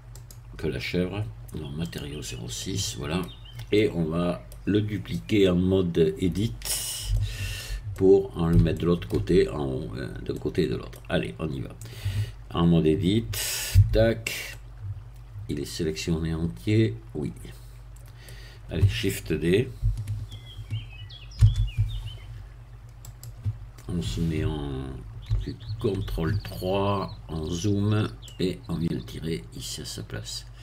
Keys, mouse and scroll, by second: 0.1 click, 1.9 click, 2.6 middle click, 3.3-3.7 scroll down 1, 3.7-4.7 middle drag, 5.1-6.9 middle drag, 7.1 shift+middle click, 7.9-9.3 shift+middle drag, 10.3 middle click, 13.7 Tab, 14.5-18.5 middle drag, 21.4 shift+d, 23.1 click, 25.7 ctrl+3, 26.7-27.9 scroll up 1, 28.3-30.6 drag.